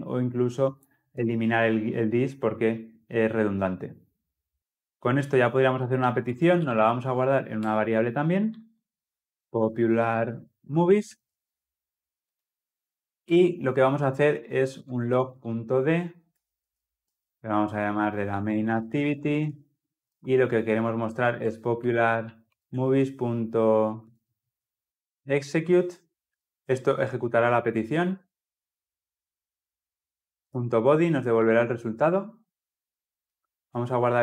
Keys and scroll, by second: 7.6 Return, 16.2 Return, 22.4 Return, 31.2 Return.